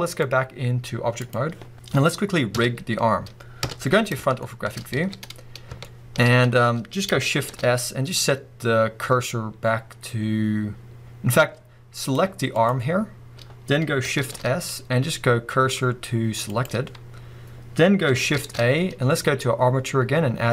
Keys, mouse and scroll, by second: 0.0-4.4 drag, 2.6 KP_4, 3.6 KP_1, 4.4-12.1 shift+middle drag, 4.8 scroll up 2, 5.0 alt+a, 5.5-5.8 scroll down 1, 6.2-7.4 scroll up 2, 7.4 shift+s, 12.6 click, 14.2 shift+s, 18.4 shift+a.